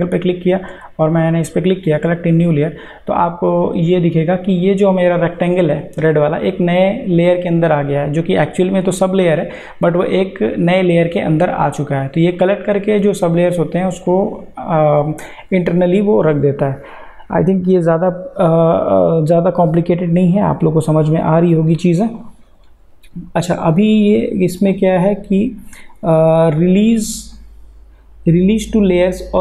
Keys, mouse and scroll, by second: 1.9 click, 11.3 click, 19.5 click, 22.2 click.